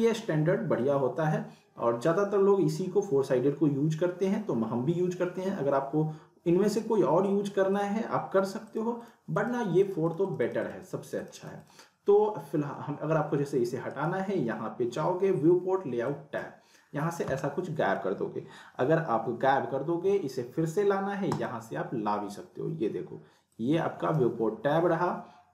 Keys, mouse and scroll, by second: 7.7 click, 13.9 right click, 16.1-16.7 drag, 21.3 click, 23.5-24.1 drag.